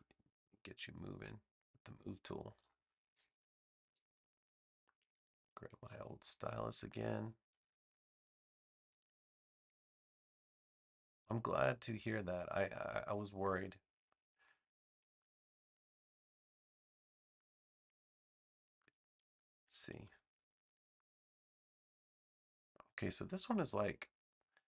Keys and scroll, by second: 8.9 a.